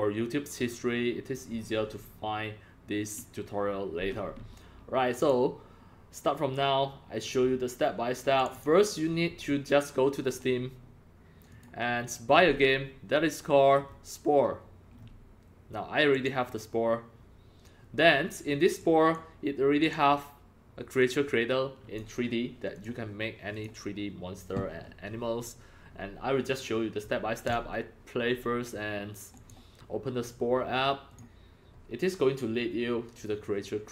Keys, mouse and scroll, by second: 5.2 click, 6.0 click, 8.4 click, 8.5 double click, 9.5 click, 11.5 click, 13.8 scroll down 4, 15.0-16.2 scroll down 2, 16.2-20.9 drag, 16.2 scroll down 1, 21.0 click, 22.8 click, 23.5 click, 24.1 click, 27.5 click, 29.4 click, 31.1 click.